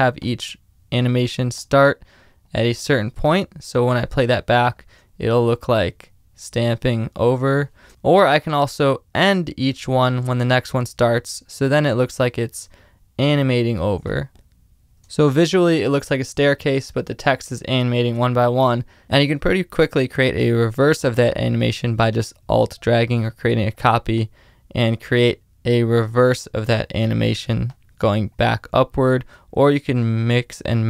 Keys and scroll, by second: 4.9 space, 7.8 space, 7.9 super+z, 14.5 space, 14.6 super+z, 15.0 space, 17.9 space.